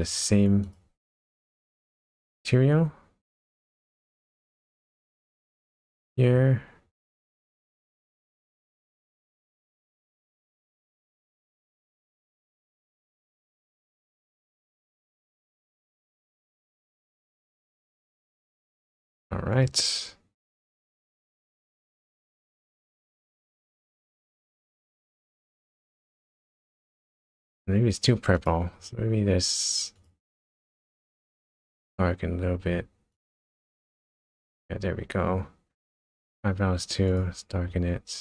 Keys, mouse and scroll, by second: 0.1 click, 1.6 click, 5.7 click, 7.1 click, 7.9 click, 9.3 click, 10.0 click, 12.0 click, 18.7 click, 19.5 click, 20.4 click, 21.7 click, 22.3-23.0 scroll up 4, 23.2 scroll down 1, 23.4-24.7 scroll down 9, 25.1-26.7 scroll up 8, 27.0 scroll down 1, 28.3 click, 29.9 click, 30.7 click, 33.1 click, 36.3 click, 37.1 click.